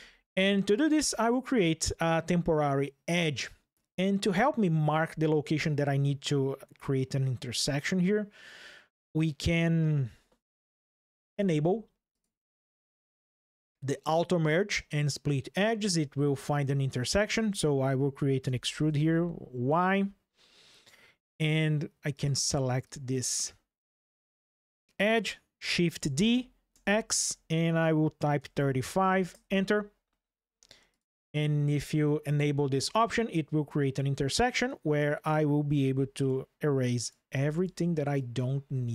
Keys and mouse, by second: 10.7 click, 11.8 click, 13.1 ctrl+shift+2, 13.8-14.8 drag, 18.2 e, 18.6 y, 19.6-21.3 drag, 21.9 click, 22.6 click, 25.7 shift+d, 25.8 shift+f, 26.5 x, 28.1 KP_3, 28.3 KP_5, 29.1 KP_Enter, 30.7 click, 31.5 click, 34.4 click, 35.5 x, 36.5 click, 37.0 x, 37.9 drag, 38.3 x.